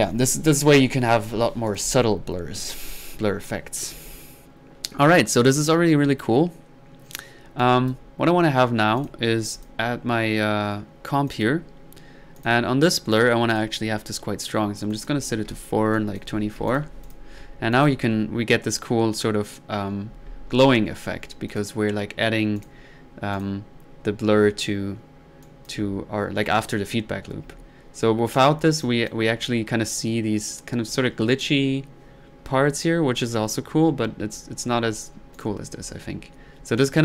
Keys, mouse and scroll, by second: 1.7 click, 2.7 click, 3.9 1, 7.6-8.2 drag, 9.0 drag, 9.6 click, 11.3 click, 12.4 click, 14.9 click, 16.0 click, 17.0 click, 17.7 click, 21.5 click, 22.6 click, 23.3 drag, 25.4-26.0 drag, 27.3 1, 28.4-28.8 drag, 28.8-29.4 drag, 35.4 drag.